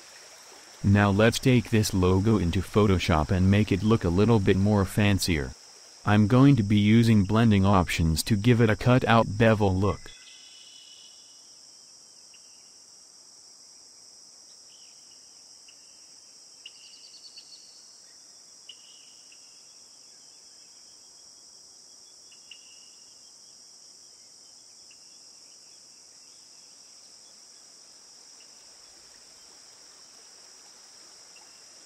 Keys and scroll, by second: 10.6-12.5 typing, 18.6 ctrl+shift+f, 20.0 ctrl+shift+F5, 26.8 ctrl+v, 29.8 Return.